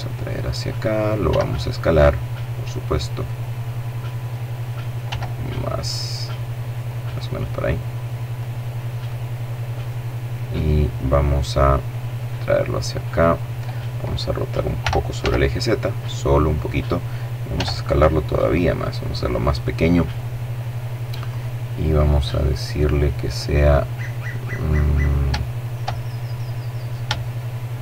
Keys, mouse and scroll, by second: 0.3 s, 2.2 click, 3.2-3.8 scroll up 2, 4.1 s, 5.8 click, 6.5-7.9 drag, 8.1 click, 9.3 right click, 9.8 middle click, 11.1-12.6 drag, 13.8 r, 14.1 z, 15.5 click, 16.5 s, 18.2 click, 20.3 click, 22.0 click, 23.0 middle click, 23.7-24.4 scroll up 3, 24.4 shift+middle click, 25.0 shift+middle click, 25.7-26.1 scroll up 1, 26.1 shift+middle click, 27.2 shift+middle click.